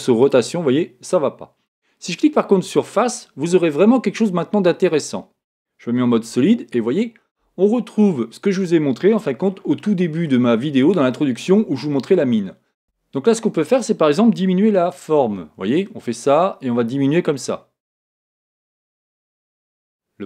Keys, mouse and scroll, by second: 0.2 click, 2.6 click, 6.1 z, 6.8-12.9 middle drag, 8.5-9.8 scroll down 1, 12.9 Tab, 15.3 s.